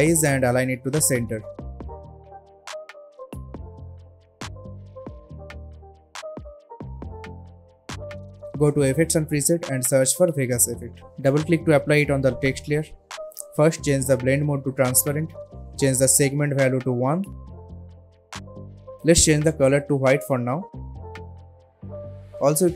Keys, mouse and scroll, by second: 0.4-0.9 shift+click, 4.7 alt+scroll down 1, 5.0 click, 5.9 ctrl+alt+Home, 6.6 click, 7.5-7.9 alt+scroll up 2, 7.9 space, 8.2-8.8 click, 8.4 space, 9.1 click, 10.4-11.6 typing, 12.1 click, 14.2 click, 17.4 Return, 19.8 click, 22.0-22.7 scroll up 1.